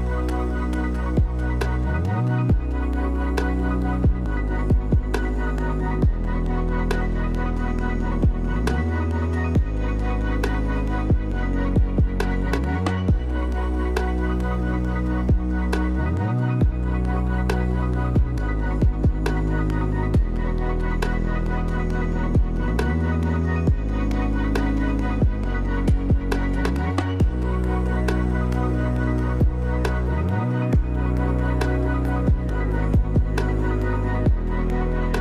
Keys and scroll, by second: 9.8 ctrl+z.